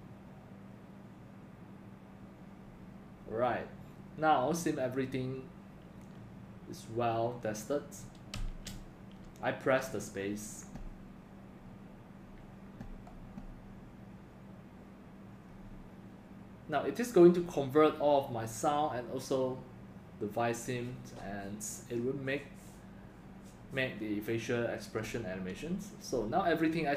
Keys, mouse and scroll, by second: 8.3 space, 17.9 click.